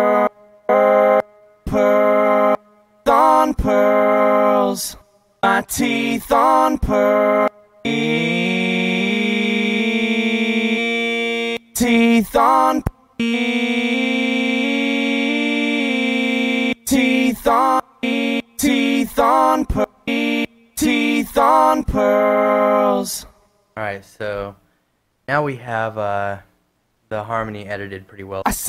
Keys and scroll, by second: 1.9 space, 2.8 space, 3.3 space, 5.2 space, 5.7 space, 7.7 space, 11.9 space, 17.1 space, 18.7 space, 20.0 space, 21.0 space, 23.7 space, 25.6-26.4 typing.